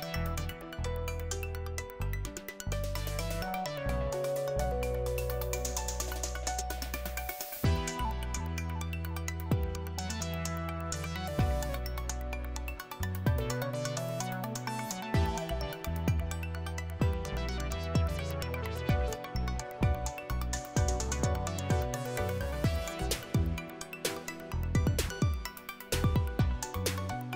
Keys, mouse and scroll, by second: 0.0 click, 2.7 click, 5.9 click, 7.8 click, 11.1 click, 13.0 click, 13.1-19.9 typing, 14.4 click, 15.8 click, 17.3 click, 18.5 click, 21.7 click, 25.5 click.